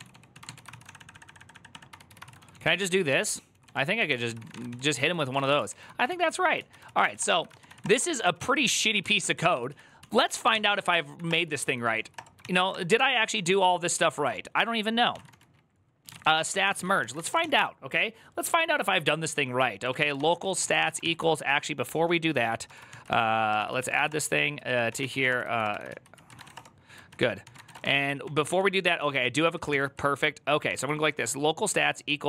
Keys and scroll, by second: 0.0-7.5 typing, 6.4 Return, 6.4 ctrl+u, 7.6 Return, 7.9 ctrl+d, 8.1 ctrl+d, 8.8-12.9 typing, 11.9 Return, 13.2 ctrl+d, 13.9 ctrl+d, 13.9-17.7 typing, 19.4-27.4 typing, 24.3 ctrl+e, 26.9 ctrl+n, 27.2 ctrl+c, 27.5 Return, 27.6 ctrl+d, 28.0 ctrl+d, 29.2 ctrl+s, 30.5 ctrl+c, 30.5-31.0 typing, 32.2 Tab.